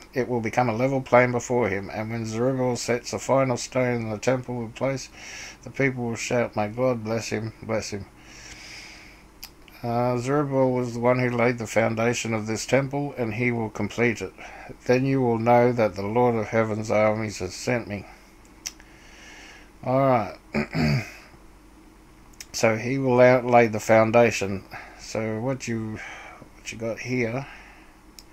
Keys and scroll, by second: 28.1-28.3 typing.